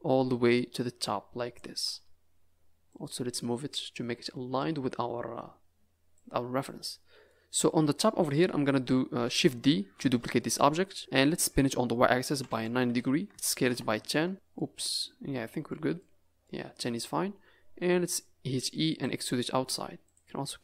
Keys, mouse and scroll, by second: 0.4 click, 1.8 Tab, 2.1 scroll down 3, 2.8 click, 4.1 Tab, 4.4 scroll up 5, 6.1 click, 7.2 middle click, 8.3 KP_Decimal, 9.9 shift+d, 10.8 z, 12.2 r, 13.3 s, 14.3 scroll down 10, 14.5 middle click, 15.2-15.6 scroll down 3, 15.6 middle click, 16.2 scroll up 5, 16.4 middle click, 17.1-17.5 scroll up 1, 17.8 e, 19.3 middle click, 20.0 click.